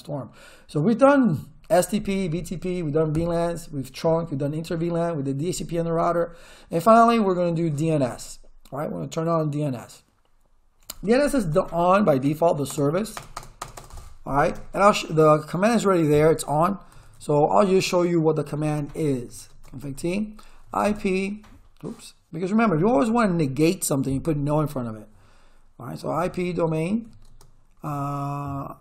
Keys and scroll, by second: 11.5 Return, 12.7 space, 14.5 Return, 16.7-19.6 typing, 19.8 Return, 20.6 p, 20.8 space, 21.0 d, 22.9 BackSpace, 25.7-27.8 typing.